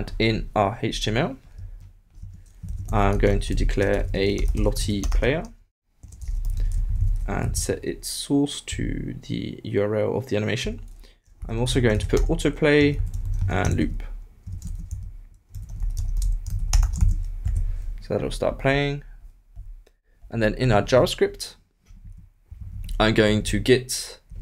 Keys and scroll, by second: 2.4-3.4 typing, 6.7 shift+=, 6.9 shift+', 7.3 shift+Left, 7.5 super+v, 13.4-14.9 typing, 14.4 shift+Return, 16.7-17.6 typing, 18.1 super+s, 22.5 alt+Left.